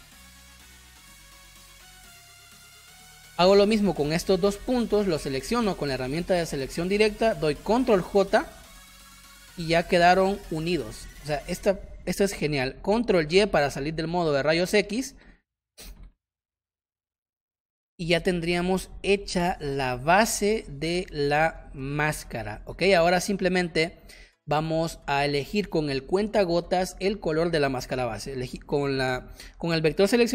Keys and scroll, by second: 2.0 space, 3.0 space, 7.7 ctrl+j, 10.8 ctrl+z, 13.2 ctrl+y, 15.2 ctrl+KP_Subtract, 17.1 space, 19.1 v, 19.4 space, 22.4 ctrl+z, 23.1 space.